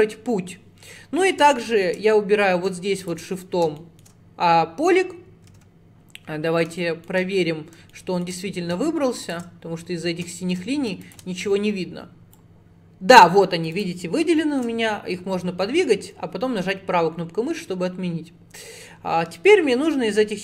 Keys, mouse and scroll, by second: 0.8-1.6 scroll up 3, 1.6 shift+middle click, 2.1-3.1 scroll up 2, 3.1 shift+click, 3.8 shift+middle click, 4.6 scroll down 4, 5.6 ctrl+z, 6.8 shift+middle click, 7.4-8.0 scroll up 4, 8.0 shift+middle click, 8.4 scroll up 4, 9.3 shift+click, 9.8-10.2 scroll down 10, 10.4 shift+middle click, 11.1 ctrl+click, 12.4 click, 14.5 shift+middle click, 15.1 scroll up 2.